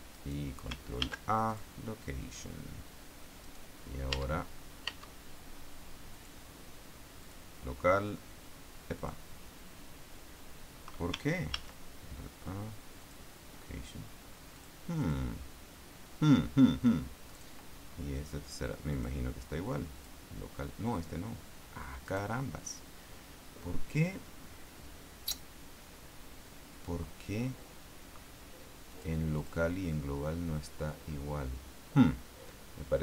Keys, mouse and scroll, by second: 0.5 right click, 1.4 ctrl+a, 1.9 ctrl+click, 3.8 right click, 4.5 Tab, 5.2 Tab, 6.5 click, 7.6 click, 9.3 click, 11.9 ctrl+a, 13.4 click, 14.9 click, 15.4 click, 17.6 right click, 19.3 click, 20.3 click, 22.4 right click, 29.2 click, 29.7 click.